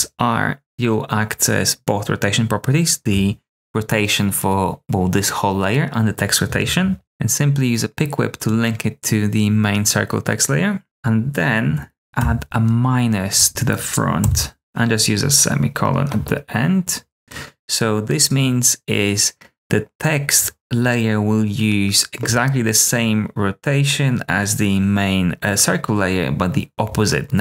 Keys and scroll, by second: 12.0 Up, 12.1 -, 13.3 Down, 14.2 ;.